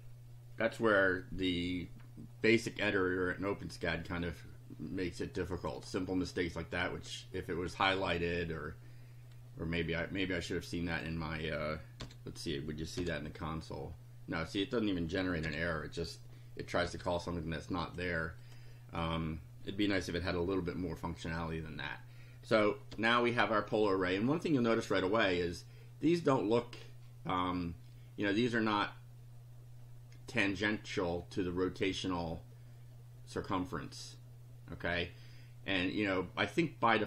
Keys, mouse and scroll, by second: 5.6 click, 10.9 click, 12.0 r, 13.0 F5, 15.4 F5, 16.9 BackSpace, 17.9 click, 18.4 click, 22.9 F5, 23.9-25.5 drag.